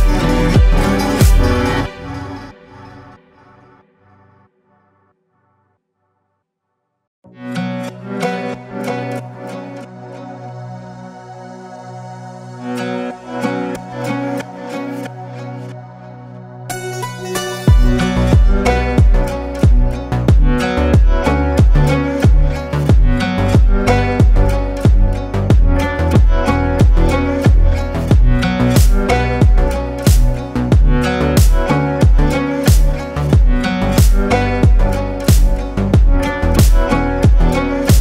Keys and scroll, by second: 28.0 ctrl+g, 32.0 space.